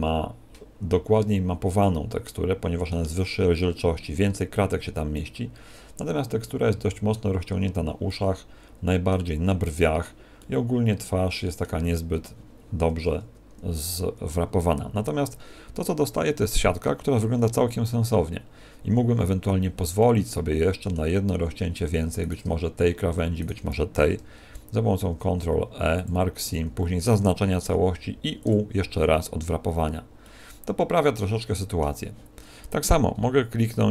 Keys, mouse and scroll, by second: 2.2 middle click, 5.1 middle click, 8.0 middle click, 10.3 middle click, 14.9 Tab, 19.9 middle click, 21.2 scroll up 1, 21.8 scroll up 4, 22.2 right click, 23.4 shift+right click, 24.9 ctrl+e, 26.4 a, 26.6 a, 27.6 u, 30.2 middle click, 32.9 scroll up 2.